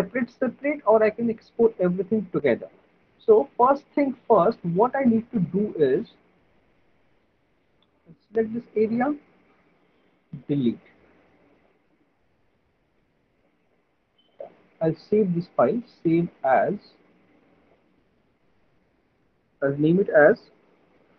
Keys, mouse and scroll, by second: 3.8 alt+middle click, 4.3 middle click, 4.6 middle click, 5.0 alt+middle click, 5.3 alt+middle click, 5.7 middle click, 6.5 alt+middle click, 8.6 click, 10.8 Delete, 12.8 Delete, 12.8 click, 13.7 click, 13.9 Delete, 16.0 click, 17.7 click, 20.4-21.1 typing.